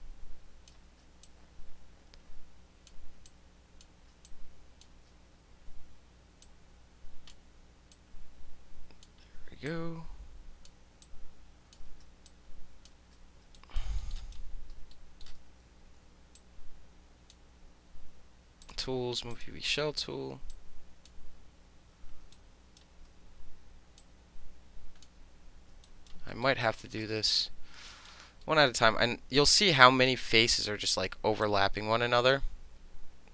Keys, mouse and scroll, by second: 0.8 ctrl+z, 1.2-2.9 drag, 3.3-3.8 drag, 3.9 ctrl+z, 4.3-4.8 drag, 4.9 ctrl+z, 6.4-7.3 drag, 7.9-9.0 drag, 9.7-10.7 drag, 11.0-11.7 drag, 11.8 ctrl+z, 12.3-12.9 drag, 13.0 ctrl+z, 13.6 alt+right click, 14.0 alt+middle click, 14.2 alt+right click, 14.9 alt+middle click, 16.4-17.3 alt+drag, 18.6 click, 19.3 click, 20.5-21.1 drag, 22.3 alt+right click, 24.0-25.0 drag, 25.9 alt+right click, 26.3 alt+middle click, 26.6 alt+click, 27.0 space, 27.9 alt+right drag, 28.4 alt+middle click, 29.5-30.1 drag, 31.4-32.3 drag.